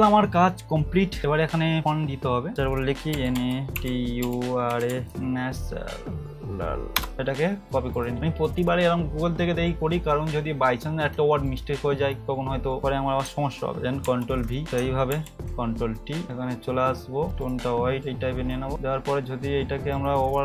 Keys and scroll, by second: 3.3-4.9 typing, 14.0 ctrl+v, 15.1 ctrl+t.